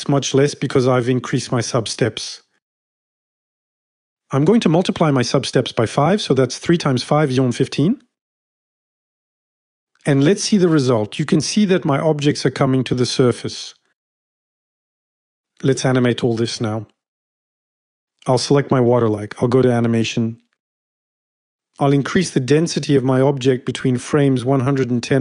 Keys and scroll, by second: 4.9-5.7 typing, 24.9-25.2 typing.